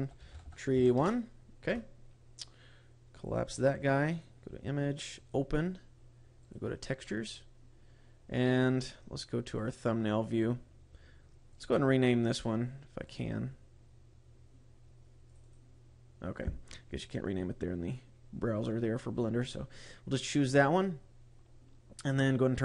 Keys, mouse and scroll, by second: 2.0-3.1 scroll down 5, 3.1 click, 4.1 click, 5.0 click, 15.5 click.